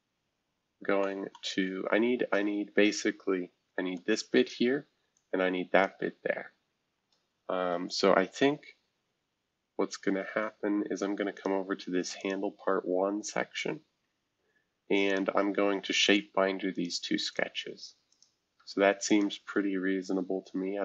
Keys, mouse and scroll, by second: 1.0 middle click, 2.3-3.6 middle drag, 3.6 F2, 3.9 click, 5.1 click, 7.7 F2, 8.2 shift+F2, 9.1-9.9 scroll down 1, 9.9-10.6 scroll down 1, 11.3 click, 12.2 click, 15.1 click, 15.5 scroll down 1, 16.3 scroll down 1, 16.7 click, 17.2 click, 17.5 click, 19.0 ctrl+click.